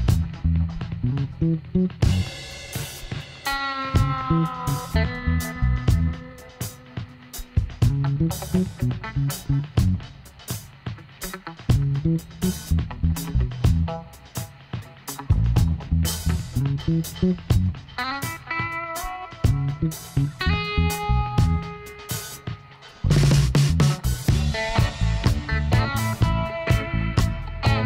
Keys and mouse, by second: 0.1-2.7 middle drag, 2.0 k, 7.0-8.3 middle drag, 8.3-10.6 drag, 10.7 click, 10.7-14.3 middle drag, 14.3 click, 14.6 middle click, 15.1 middle click, 15.5 middle click, 17.0 Tab, 18.2 click, 18.9 Tab, 21.6 click, 23.4-26.0 right drag, 25.4 f, 26.1 middle click, 26.7 a.